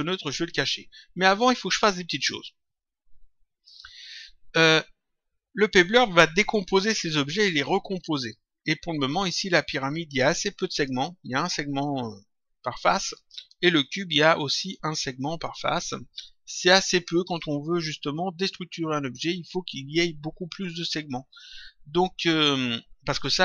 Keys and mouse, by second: 9.1 click, 10.7 click, 13.6 click.